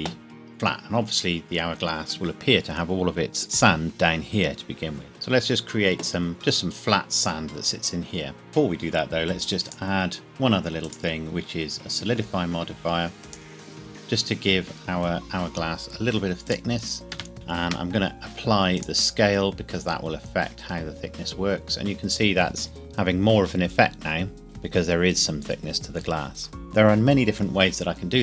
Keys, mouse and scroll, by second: 9.7 click, 13.3 click, 16.5 click, 17.1 KP_0, 17.3 ctrl+a, 18.8 click, 19.9 scroll up 1, 24.3 scroll down 1.